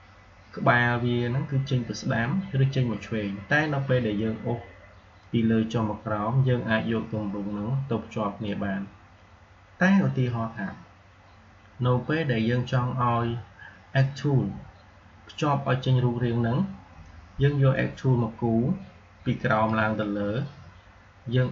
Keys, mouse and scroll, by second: 5.0-10.8 drag, 17.6-21.5 drag.